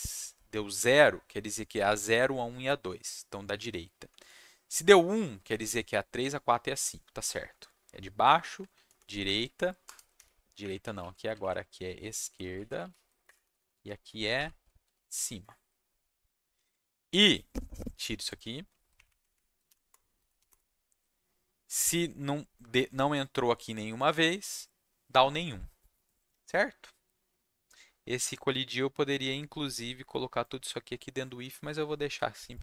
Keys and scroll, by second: 5.1 Down, 5.3 Down, 7.1 Down, 7.3 Down, 8.3 Down, 8.6 Down, 8.9 Down, 9.0 Left, 9.2 Up, 9.4 Left, 9.8 BackSpace, 10.1 3, 10.6 Up, 11.0 Left, 11.7-13.3 typing, 13.4 Down, 13.5 Down, 13.7 Left, 14.3 ctrl+alt+shift+Left, 14.5-15.6 typing, 18.9 shift+Up, 19.0 shift+Up, 19.2 shift+Up, 19.3 shift+Up, 19.9 Return, 20.1 Down, 20.5 Return.